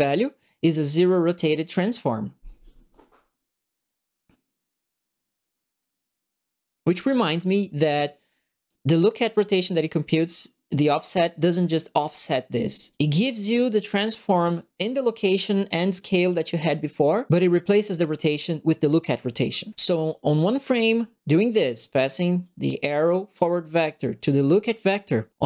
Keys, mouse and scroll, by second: 12.0 click, 12.9 click, 22.4 click, 24.7 click.